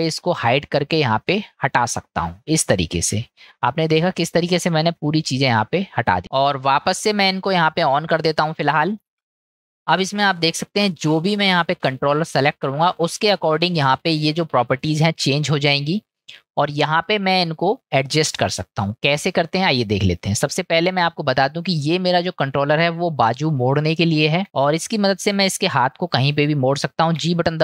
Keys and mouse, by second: 0.5 click, 1.2 click, 1.7 click, 2.5 click, 3.1 click, 3.8-5.5 middle drag, 6.7 click, 7.2 click, 7.5 click, 7.9 click, 8.3 click, 8.8 click, 9.2 click, 9.3 click, 10.0 middle click, 19.6-20.0 middle drag, 20.8-21.3 middle drag, 23.9-24.4 shift+middle drag, 27.1 g.